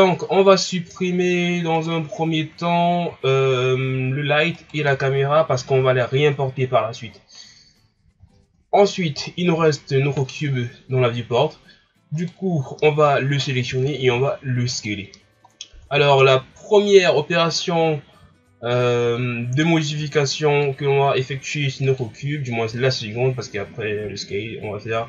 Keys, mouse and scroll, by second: 0.0 scroll down 2, 0.7-1.1 scroll up 1, 1.1-1.8 scroll down 1, 1.8-2.2 right drag, 2.2-2.6 ctrl+scroll down 1, 2.6 scroll up 2, 4.5-7.9 shift+right drag, 7.9-8.5 ctrl+scroll down 2, 8.8-9.3 scroll up 1, 9.3-12.2 ctrl+scroll down 7, 12.2 right click, 12.4 scroll down 1, 12.9-13.3 ctrl+scroll up 1, 13.7 s, 15.5 ctrl+scroll down 2, 16.1 shift+scroll up 2, 20.2-22.0 drag.